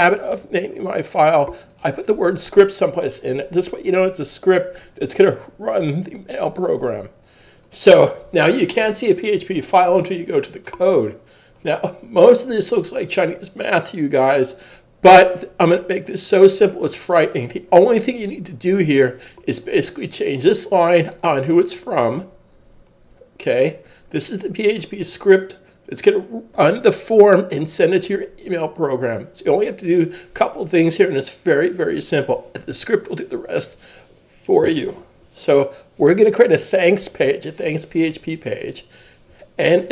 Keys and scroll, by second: 0.1 shift+super+s.